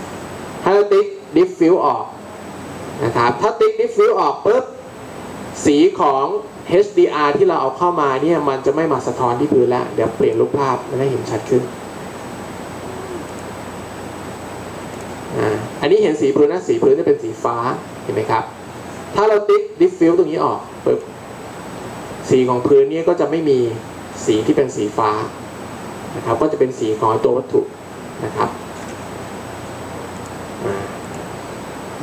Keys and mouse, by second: 10.2-12.2 drag, 15.0 click, 31.2-32.0 drag.